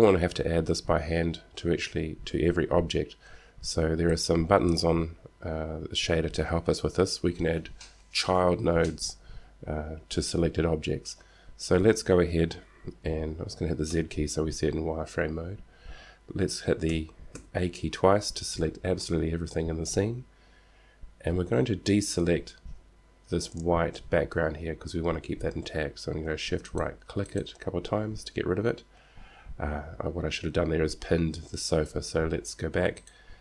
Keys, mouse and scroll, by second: 4.4-7.9 drag, 14.1 z, 17.2 a, 18.2 a, 26.9-29.4 right drag, 33.2-33.4 right drag.